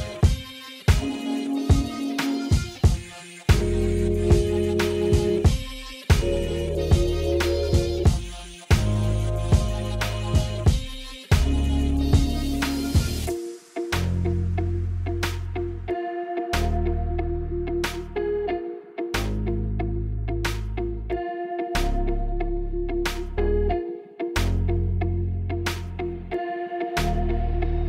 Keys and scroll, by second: 1.3 q, 1.6 1, 4.0 ctrl+z, 4.3 ctrl+z, 5.5 1, 7.6 g, 10.9 g, 13.4 g, 15.5 alt+z, 18.3 alt+z, 19.2 ctrl+a, 19.7 ctrl+a, 20.5 ctrl+z, 20.9 ctrl+z, 22.2 Escape, 22.5 ctrl+a, 23.6 Tab, 26.2 alt+z, 26.5 alt+z, 26.7 alt+z, 26.9 alt+z.